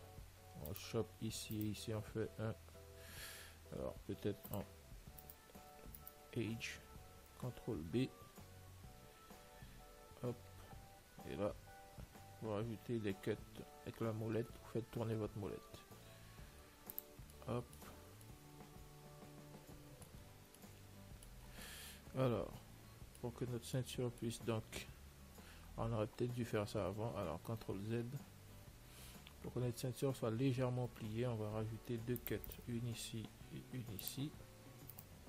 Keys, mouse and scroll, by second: 1.0-3.8 right drag, 4.7 click, 5.5-8.1 right drag, 8.0-11.6 middle drag, 8.4 ctrl+b, 17.5-25.8 middle drag, 27.4 ctrl+z, 28.0-32.7 middle drag, 31.9 ctrl+r.